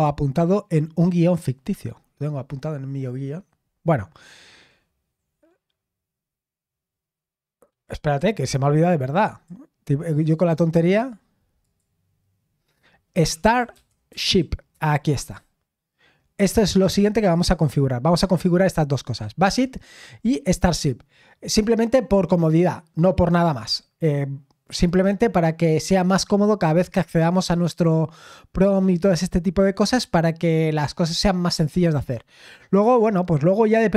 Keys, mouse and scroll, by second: 9.2 click, 10.0 click, 10.8 click, 11.6 click, 14.1 typing, 14.7 Return.